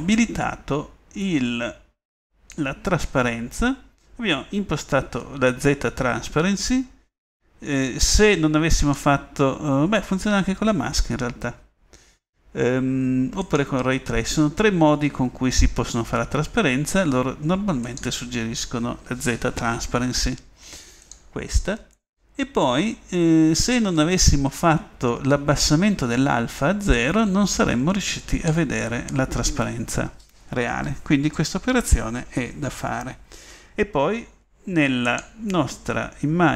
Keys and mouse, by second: 2.7-8.9 middle drag.